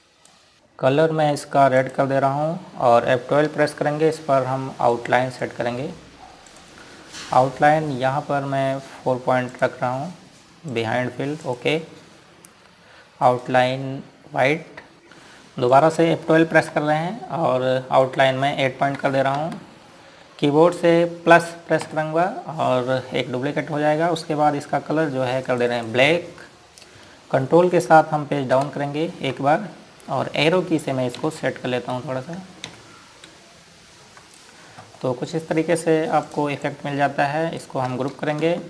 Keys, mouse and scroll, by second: 4.6 F12, 6.0 click, 10.6 click, 14.3 right click, 14.9 F12, 15.2 Escape, 15.7 click, 17.7 F12, 19.1 click, 19.9 KP_8, 20.5 Return, 22.9 KP_Add, 26.5 click, 26.7 right click, 29.6 ctrl+Page_Down, 32.3 Down, 33.0 Right, 33.8 ctrl+Left, 34.4 Up, 37.6 click.